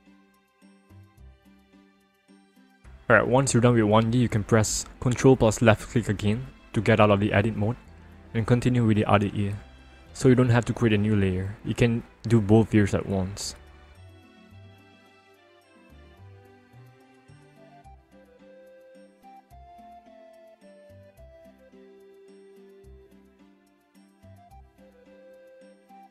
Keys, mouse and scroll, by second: 1.4 alt+click, 3.2 alt+click, 3.8 ctrl+click, 5.2-8.3 ctrl+scroll up 1, 9.8 click, 11.2 click, 12.4 click, 14.6 click, 17.4 click, 18.6 click, 20.2 click, 22.0 click, 23.3 click, 24.9 alt+click, 25.2 alt+double click, 25.8 alt+click.